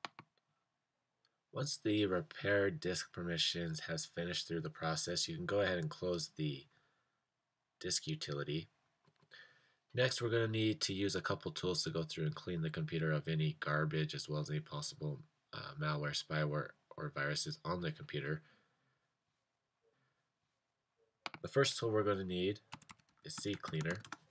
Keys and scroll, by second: 22.4-24.3 typing.